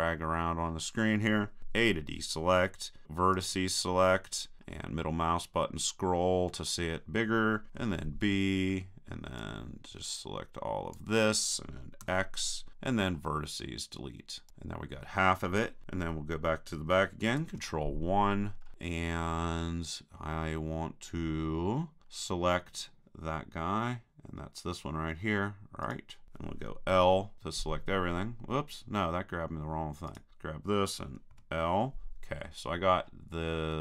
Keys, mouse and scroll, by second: 1.6 a, 3.4-4.6 drag, 4.6-9.4 middle drag, 7.8 b, 12.0 x, 17.4 ctrl+KP_1, 18.4 middle click, 22.0-25.4 middle drag, 25.9-27.4 right drag, 26.9 l, 30.1-31.7 right drag, 31.3 l, 32.7-33.8 middle drag.